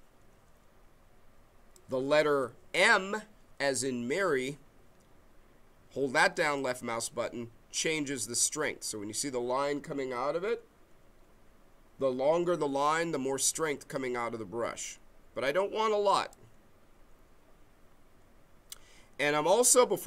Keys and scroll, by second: 4.4 m.